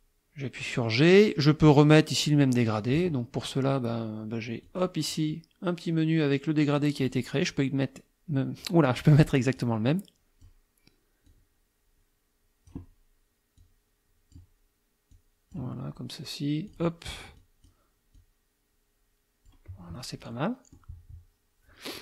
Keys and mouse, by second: 0.6 click, 4.7 click, 7.0 click, 9.6-10.6 drag, 11.3-12.9 drag, 13.6 click, 15.1 click, 16.7 click, 17.4 click, 18.2-19.7 drag, 20.3 click.